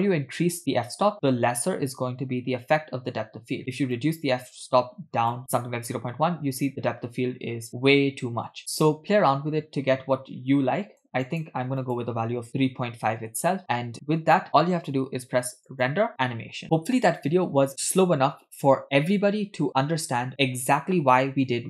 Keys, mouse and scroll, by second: 3.9-5.4 drag, 8.5-11.2 drag, 11.3 click, 11.8-13.3 drag, 14.1-15.7 scroll up 5, 15.7-16.6 drag.